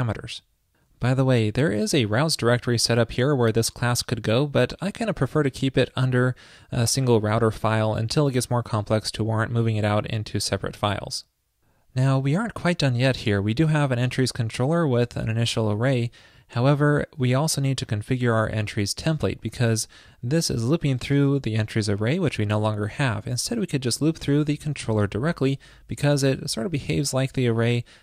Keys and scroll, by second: 25.9 alt+shift+Left.